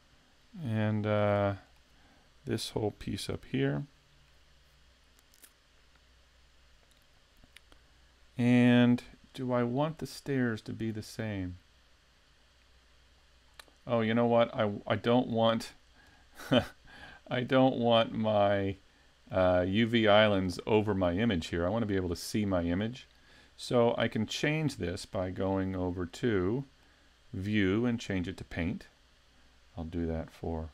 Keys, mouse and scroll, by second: 0.8 shift+middle click, 1.5 middle click, 3.3 l, 3.8 scroll down 1, 4.3 middle click, 13.5-14.5 scroll down 6, 14.5 middle click, 15.7-16.8 scroll down 2, 16.1 middle click, 16.8-17.2 scroll up 1, 17.6 middle click, 25.2 middle click, 28.0 click.